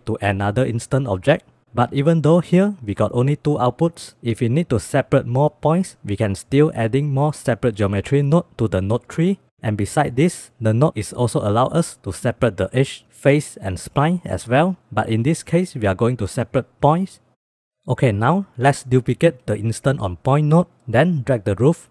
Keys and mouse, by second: 2.2 drag, 3.0-3.4 drag, 4.0-4.3 middle drag, 5.5-9.4 drag, 11.1-15.8 drag, 17.5 middle drag, 18.0 click, 18.4 click, 18.8 middle click, 19.2 shift+d, 20.6 middle click.